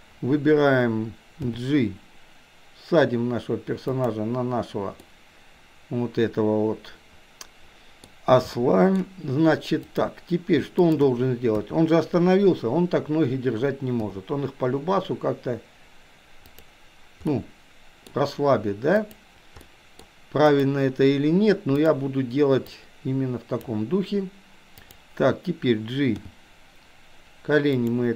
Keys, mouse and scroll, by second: 1.4 g, 5.0-8.1 middle drag, 8.5-9.0 shift+middle drag, 10.8 shift+click, 11.6 KP_3, 14.1 g, 17.3-18.1 middle drag, 19.0 click, 19.8-20.1 middle drag, 20.5 click, 22.8-23.8 drag, 24.8 click, 26.3 g.